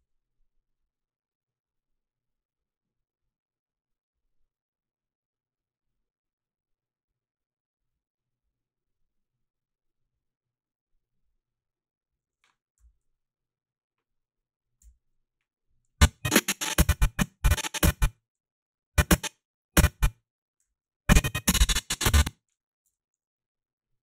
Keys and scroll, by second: 14.8 i, 22.2 o.